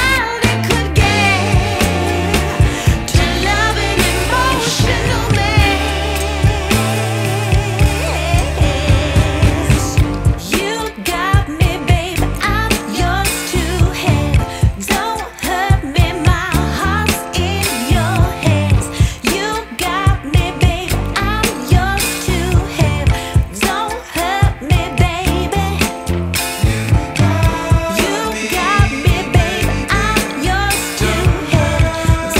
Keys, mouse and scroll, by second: 2.1-4.0 drag, 4.4 click, 12.4 space, 13.2-16.1 drag, 16.1 Right, 17.2 shift+Left, 19.1-20.4 middle drag, 20.4 ctrl+s, 21.0-25.5 middle drag, 25.5-28.3 drag, 28.3 space, 29.6 ctrl+s, 30.0 space, 31.0-32.3 drag.